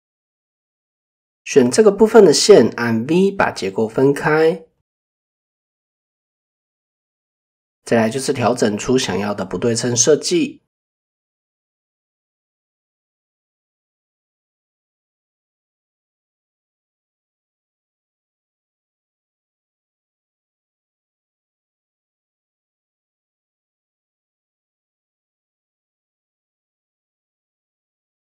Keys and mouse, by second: 1.0 shift+middle click, 13.0 click, 14.2 click, 14.7 click, 16.2 alt+click, 16.9 alt+click, 17.3-18.5 drag, 19.9 alt+click, 20.2 click, 23.9 shift+click, 24.5 click, 28.1 alt+click.